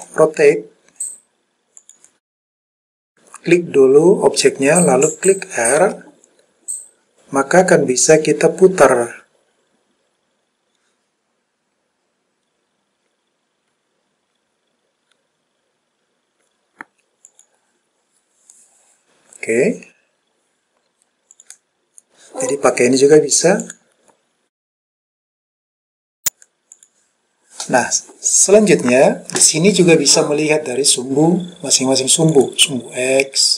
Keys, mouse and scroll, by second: 0.0 r, 1.9 click, 5.9 r, 17.4 click, 21.4 click, 22.6 click, 23.7 click, 25.4 click, 26.8 click, 32.4 click.